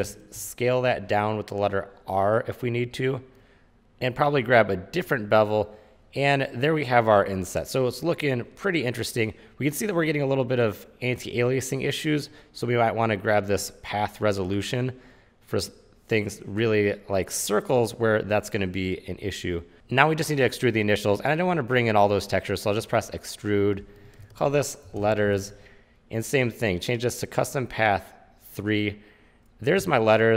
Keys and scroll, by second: 0.5 r, 24.9-26.0 typing.